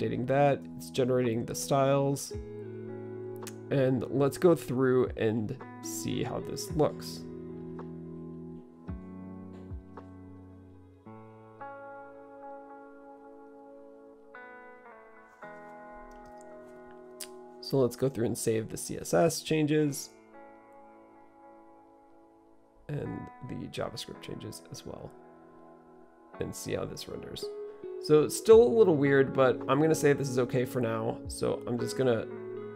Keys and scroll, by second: 29.3 typing.